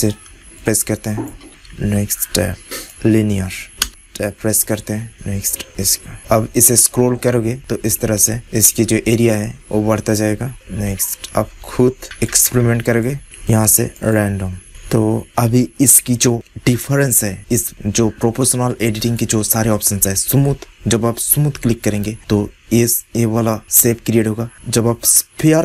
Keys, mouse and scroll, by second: 0.9 middle click, 1.0 click, 1.8 Tab, 2.8-6.1 drag, 3.7 Tab, 3.8 Tab, 11.2 Tab, 11.2-14.6 drag, 12.0 Tab, 13.2 Tab, 18.9-21.7 drag, 23.6-25.6 drag.